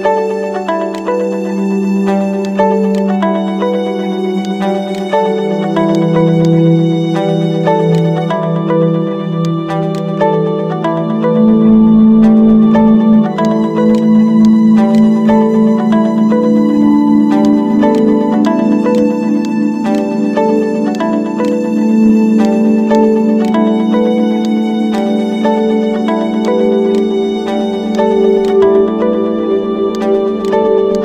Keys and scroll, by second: 1.4 ctrl+z.